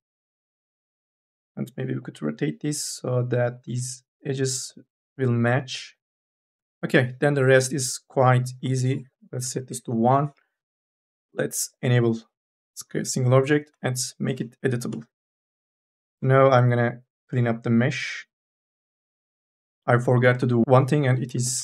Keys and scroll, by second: 1.2 r, 3.8 ctrl+z, 9.3 KP_1, 9.6 Return, 13.5 c, 14.5 1, 15.5 m, 15.8 e, 19.8 ctrl+z, 20.5 ctrl+z, 20.9-21.6 typing.